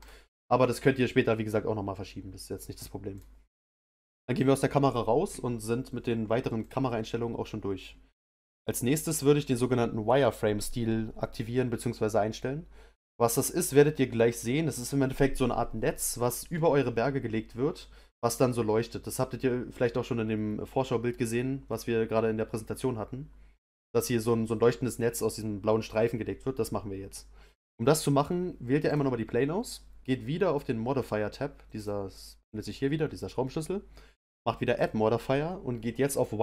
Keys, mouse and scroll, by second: 3.1 click, 21.7-24.7 middle drag, 28.8 click, 31.7 click, 34.7-36.4 drag.